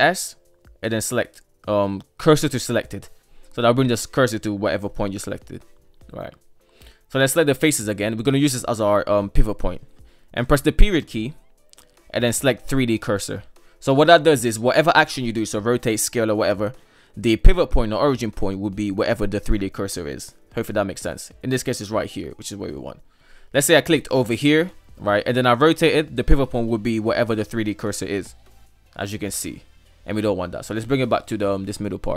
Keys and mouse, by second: 3.7 shift+middle click, 6.2 KP_3, 6.5 right click, 7.4 ctrl+right click, 8.5 shift+middle drag, 20.2 middle click, 21.0 r, 23.8 click, 24.1 click, 28.3 r, 29.7 ctrl+z, 30.6 shift+s.